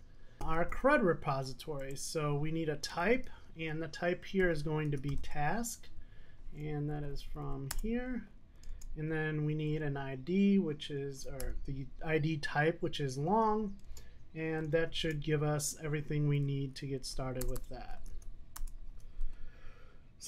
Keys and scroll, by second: 7.8 Return, 18.1 Tab.